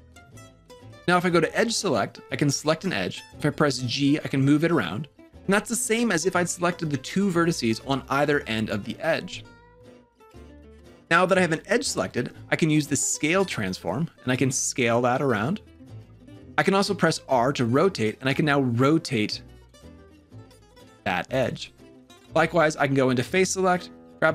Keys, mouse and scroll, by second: 1.6 2, 2.2 click, 3.8 g, 13.5 s, 16.5 r, 22.5 3, 23.2 click.